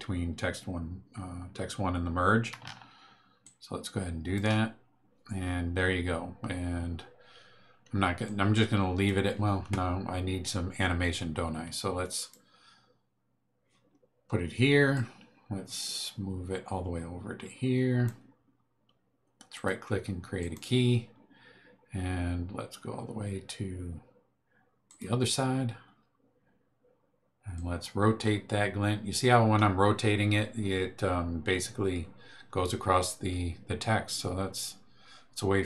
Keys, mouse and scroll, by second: 3.4-4.5 ctrl+drag, 8.2-9.2 drag, 12.1 click, 14.9-18.2 drag, 19.5 right click, 20.4 click, 24.8 click, 27.5-35.6 drag.